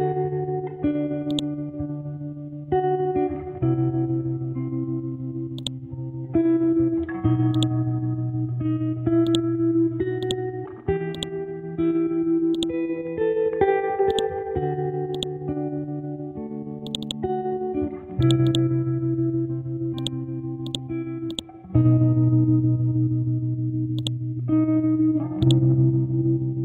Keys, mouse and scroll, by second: 1.3 click, 5.6 click, 11.6-12.5 scroll down 1, 12.5-16.9 drag, 19.0-20.0 scroll up 1, 20.0-22.8 drag, 22.8-24.0 scroll up 1, 24.0-26.6 drag.